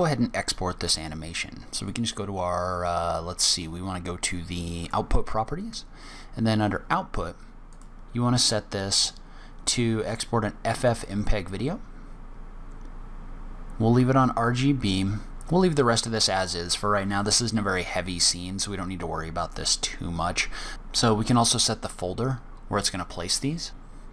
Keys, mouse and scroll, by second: 1.8 click, 4.7 click, 7.6 click, 20.9 click.